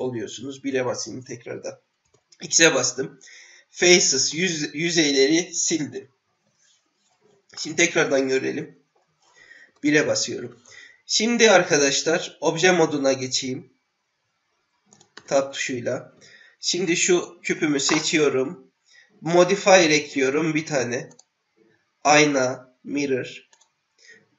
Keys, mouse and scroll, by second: 0.2 KP_1, 2.0 x, 7.5-8.9 middle drag, 9.6 KP_1, 13.3 Tab, 14.9 click, 15.2 Tab, 16.7 click, 20.1 click, 21.1-23.6 drag.